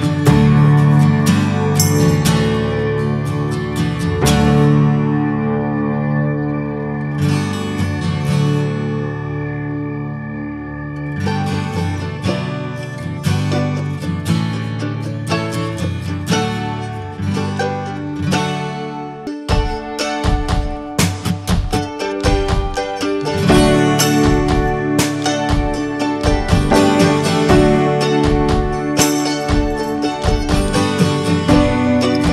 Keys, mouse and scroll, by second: 4.0 scroll down 2, 4.4-5.6 shift+middle drag, 5.6-8.7 scroll up 2, 8.7-12.0 drag, 12.0 scroll down 4, 12.4 middle click, 12.8 scroll down 3, 13.2-14.5 shift+middle drag, 14.5-15.1 scroll up 3, 14.8 shift+middle click, 15.6 scroll up 3, 15.9-19.5 shift+middle drag, 19.5-24.0 drag, 24.0 f, 27.1-30.6 ctrl+drag, 30.6-31.2 scroll down 2, 31.2-31.7 middle drag, 31.7 scroll down 1, 31.9-32.3 shift+middle drag.